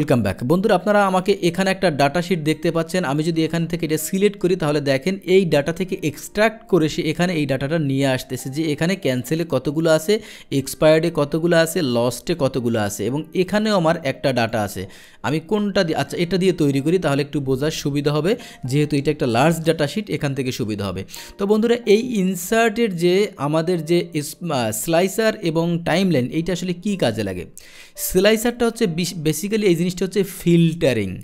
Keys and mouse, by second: 2.5 click, 3.1 click, 3.8 click, 8.8 click, 9.7 click, 10.7 click, 11.5 click, 13.4 click, 14.4 click, 16.1 click, 19.6 ctrl+shift+l, 22.8 click.